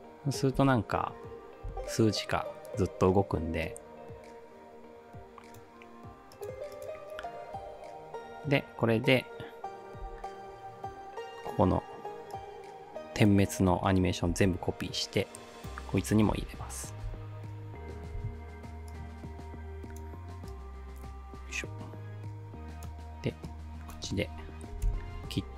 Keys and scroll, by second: 0.6 space, 1.7 space, 10.1 t, 14.3 ctrl+c, 16.4 ctrl+v, 17.1 space, 18.2 space, 24.9 alt+].